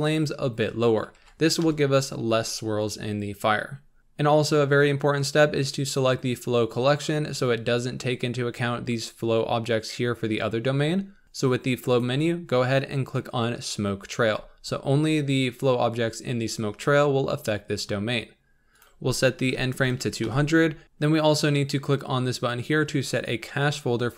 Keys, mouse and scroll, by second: 1.6-7.5 drag, 7.5 scroll down 11, 10.6-11.8 scroll up 3, 14.1-17.7 drag, 17.7 scroll down 2, 20.8-24.1 drag.